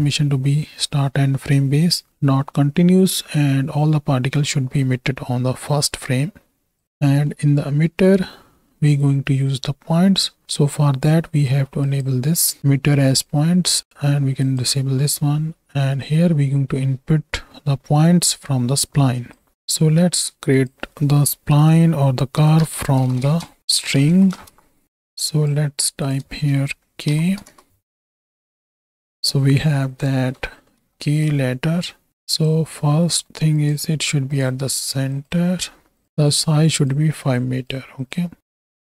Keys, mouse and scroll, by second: 6.7 click, 7.3 middle click, 8.3 middle click, 11.8 click, 14.4 click, 14.9-15.3 middle drag, 16.1-19.5 drag, 19.5 middle click, 20.0 shift+a, 25.2 click, 26.0-27.5 shift+drag, 28.5 ctrl+shift+click, 30.7 KP_7, 32.2 click, 33.2 middle click, 33.5-34.4 drag, 35.1-36.0 drag, 36.2 click, 37.4 click, 38.0 drag, 38.5-38.8 drag.